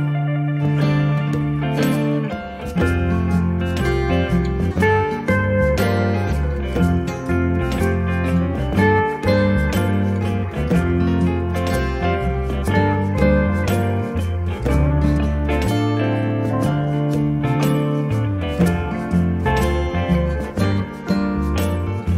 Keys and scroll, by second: 0.3 2, 0.8 5, 1.4 Return, 3.9 2, 4.4 Return, 9.1 m, 12.2 8, 12.7 Return, 14.2 space, 18.9 m.